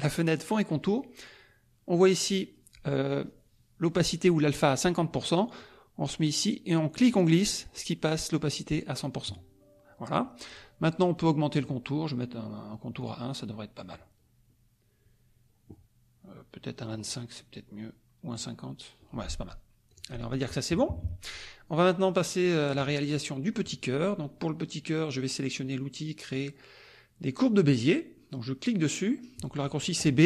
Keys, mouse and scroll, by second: 6.4-7.7 drag, 11.5 right click, 13.0 click, 16.9 right click, 18.3 click, 19.9 click, 20.9 KP_Subtract, 21.8 click.